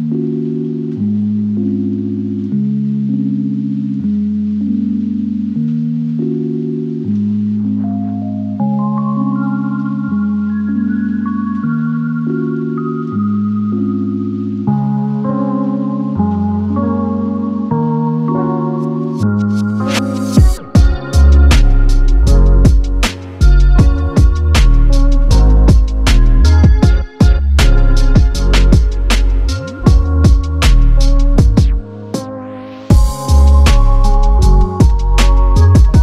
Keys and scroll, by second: 15.2 space, 21.9 typing, 23.3 typing, 27.8 super+c, 32.4 r, 34.8 super+v.